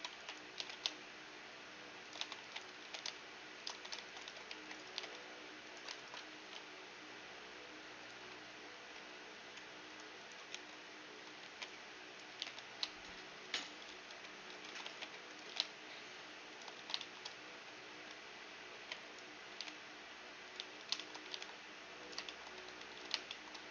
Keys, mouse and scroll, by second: 0.1 b, 0.6 g, 2.6 a, 2.6 b, 2.8 g, 3.9 a, 4.1 ctrl+r, 4.5-8.0 right drag, 4.5 a, 4.5 c, 4.9-7.1 drag, 4.9 g, 6.3 ctrl+b, 8.9 t, 9.9-12.1 drag, 10.5 t, 11.1 a, 11.4 b, 12.0 middle click, 12.3 g, 14.6 a, 14.9 b, 15.7 g, 16.7 a, 16.8-18.8 middle drag, 17.5 z, 17.9 z, 18.7 b, 19.9 g, 20.5 z, 21.0-23.7 middle drag, 21.2 g, 22.6 Tab, 22.9 z.